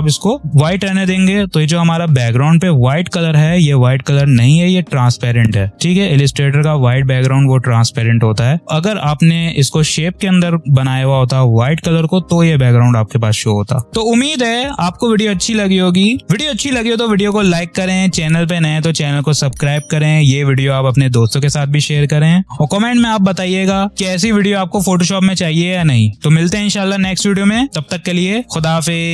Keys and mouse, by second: 9.2 click.